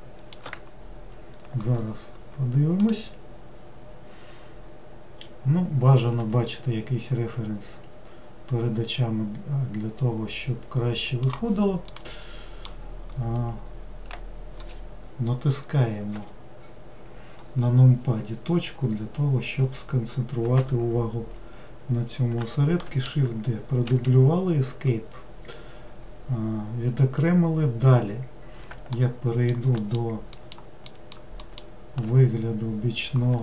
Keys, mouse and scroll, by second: 11.9-13.1 middle drag, 13.1-16.1 scroll up 1, 16.1 KP_Decimal, 18.3 scroll down 1, 19.8 scroll down 1, 22.9 shift+d, 25.0 scroll down 1, 29.0 alt+middle click, 29.8 alt+middle click, 30.4 alt+middle click, 30.9 alt+middle drag, 32.7 scroll down 1.